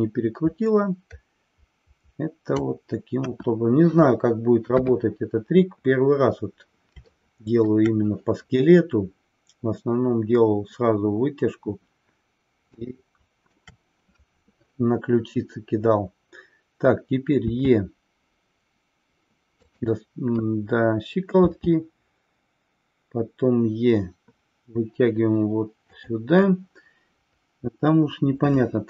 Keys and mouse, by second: 3.3 KP_1, 4.7 KP_3, 7.1-7.7 middle drag, 12.9 shift+middle click, 19.7 click.